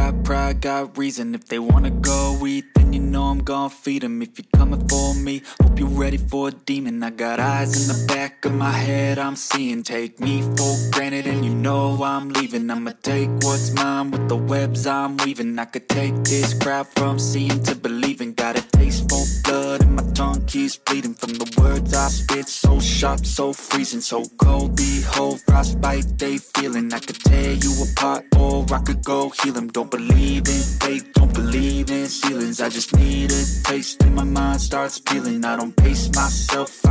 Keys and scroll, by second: 0.3 v.